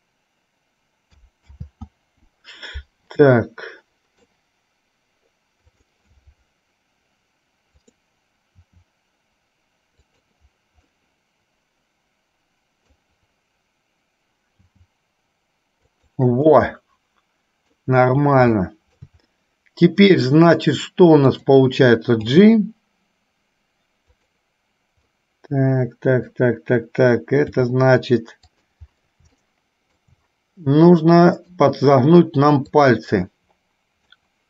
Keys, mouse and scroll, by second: 3.5-4.5 middle drag, 5.9 click, 8.8 r, 11.2-13.0 middle drag, 14.7 g, 16.7-18.0 middle drag, 18.7 shift+middle click, 22.5 g, 25.3-26.5 middle drag, 27.7 g, 29.5 shift+middle click, 31.2 middle click, 33.0-34.3 drag.